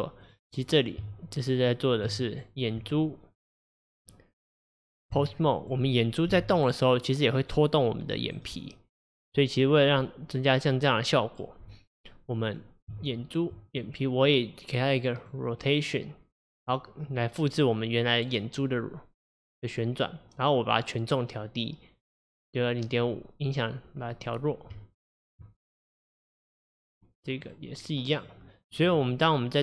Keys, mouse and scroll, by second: 1.1 Tab, 2.4 click, 2.8 Tab, 5.6 click, 6.4 g, 9.2 click, 12.5 click, 13.0 Tab, 13.8 click, 15.3 click, 16.5-19.6 drag, 24.2 click, 24.8 Tab, 25.7 click, 27.5-28.3 drag, 28.9 click.